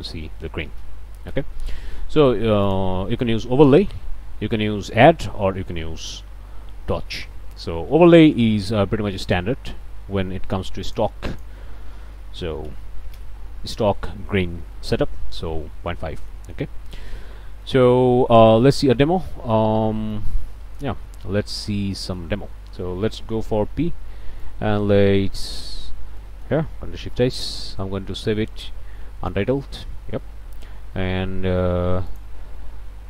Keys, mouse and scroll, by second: 0.0 m, 0.8 m, 2.6 click, 6.0 click, 7.4-8.0 scroll down 2, 8.0 click, 8.5 scroll up 1, 8.9 click, 10.9 click, 11.3 click, 11.9 middle click, 12.4 KP_Decimal, 12.6 KP_5, 13.1 KP_Enter, 14.7 middle click, 15.4-15.7 scroll up 2, 15.9 scroll down 2, 16.3 middle click, 17.2 scroll down 2, 17.6 middle click, 18.0-18.5 scroll down 2, 20.1 click, 21.0 scroll up 2, 21.4 scroll down 2, 21.9 click, 23.8 p, 24.4-25.6 drag, 26.2 ctrl+middle click, 26.9 ctrl+shift+s, 29.6 Return, 32.1 click.